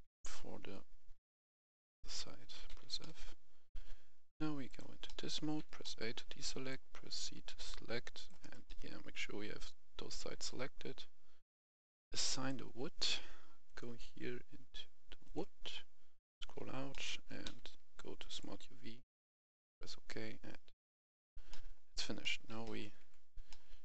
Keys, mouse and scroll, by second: 0.0 middle click, 0.5-0.9 scroll up 1, 1.2 shift+right click, 2.6 shift+f, 2.9 middle click, 4.5 click, 4.9 middle click, 5.3 a, 5.7 middle click, 6.6 click, 8.3 right click, 8.5-10.4 middle drag, 12.2 click, 15.6-16.1 scroll down 2, 16.8 middle click, 17.3 u, 18.1-20.4 drag, 20.7 middle click, 21.7 scroll down 1, 22.1 middle click, 22.9 Tab, 23.3 middle click.